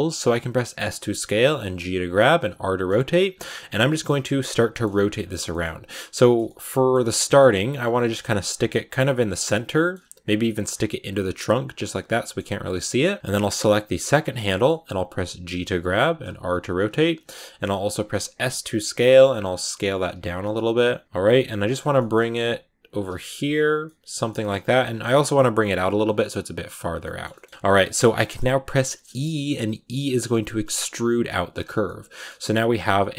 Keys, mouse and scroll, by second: 0.4-5.4 typing, 3.7 middle click, 4.6 shift+middle click, 6.1 shift+middle click, 6.8 scroll up 4, 6.9 middle click, 7.4 g, 7.8 middle click, 7.9 g, 8.6 middle click, 9.0 r, 9.4 middle click, 9.9 g, 10.3 middle click, 10.5 scroll up 1, 10.6 g, 11.1 scroll down 1, 11.2-12.3 middle drag, 12.3 g, 13.1 middle click, 14.0 right click, 14.0 scroll down 3, 14.3 middle click, 14.9 g, 16.2 r, 17.7 s, 19.2 g, 19.8 r, 20.3 scroll down 1, 20.4 middle click, 21.0 r, 21.2 g, 21.8 shift+middle click, 22.0 scroll up 5, 22.3 g, 23.0 r, 23.2 g, 23.7 middle click, 24.0 scroll down 1, 24.1 middle click, 24.3 scroll up 1, 24.4 r, 24.7 g, 25.2 middle click, 25.5 scroll up 1, 25.5 g, 26.3 g, 26.8 scroll down 4, 26.9 middle click, 27.1 scroll up 1, 27.2 shift+middle click, 27.4 g, 27.5-28.7 shift+middle drag, 28.7 e, 31.7 middle click, 32.3 r, 32.7 g.